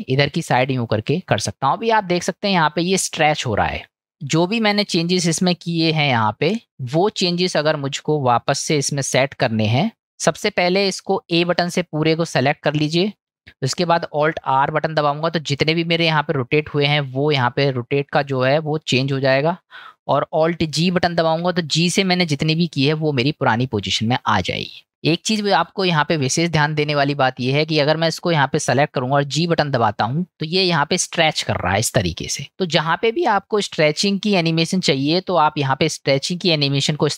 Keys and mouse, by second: 4.1 click, 6.4 click, 7.5 drag, 11.5 a, 12.7-13.3 middle drag, 15.1 alt+r, 21.2 alt+g, 22.3-24.2 middle drag, 24.5 click, 25.0-25.4 shift+middle drag, 26.9 click, 27.9 click.